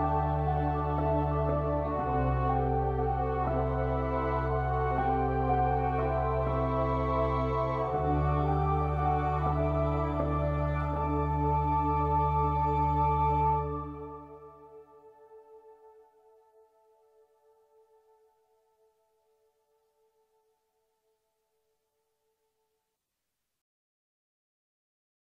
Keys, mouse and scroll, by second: 1.2-3.1 middle drag, 3.1-4.3 drag, 4.9-6.4 middle drag, 6.1 click, 6.4 e, 6.7 middle click, 8.1 middle click, 9.3-11.1 middle drag, 10.3 e, 12.4 middle click, 13.2 middle click, 14.5-16.1 middle drag, 16.4 middle click, 16.7-23.1 middle drag.